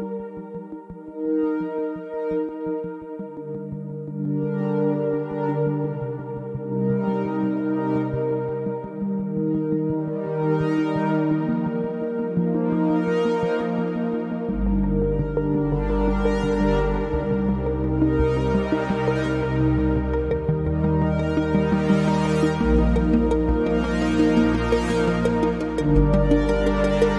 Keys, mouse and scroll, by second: 0.7 s, 2.0 click, 3.2-4.2 drag, 4.9-5.6 shift+middle drag, 5.6 g, 10.8 Tab, 11.4 Tab, 11.9 ctrl+a, 12.6-14.5 shift+middle drag, 15.8 shift+r, 16.6 Tab, 17.2 ctrl+r, 20.8 ctrl+r, 21.9 click, 22.5 1, 22.9-24.8 scroll up 1, 26.4 ctrl+r.